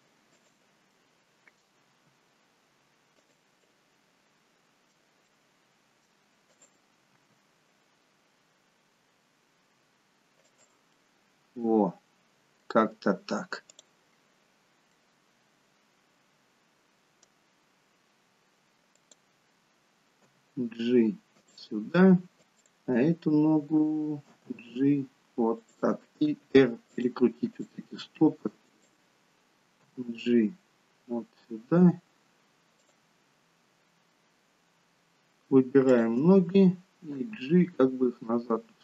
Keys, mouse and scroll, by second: 0.9 middle click, 1.9 r, 3.6 middle click, 5.3 middle click, 6.5 click, 7.1 r, 10.9 middle click, 13.7 click, 14.9 middle click, 18.9 click, 20.3 g, 22.5 click, 24.3 g, 26.4 r, 27.6 click, 27.8 r, 29.8 g, 35.9 shift+click, 37.2 g.